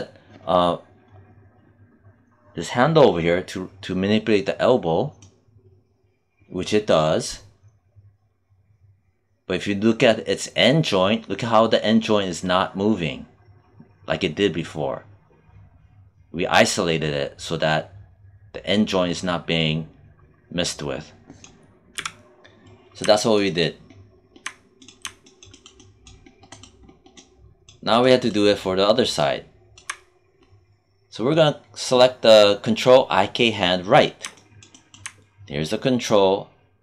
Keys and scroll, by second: 21.8 z.